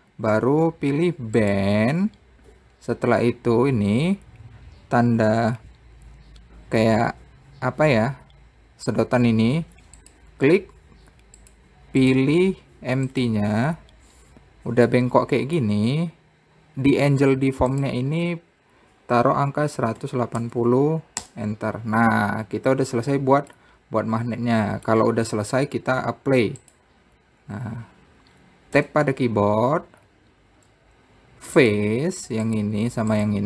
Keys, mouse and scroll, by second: 2.0 click, 10.6 click, 12.6-15.5 drag, 15.5-18.3 middle drag, 18.3-21.3 drag, 24.1-25.9 middle drag, 25.9 scroll up 2, 27.2 click, 28.0-28.8 scroll down 2, 29.4 Tab, 32.2 click, 33.1 click.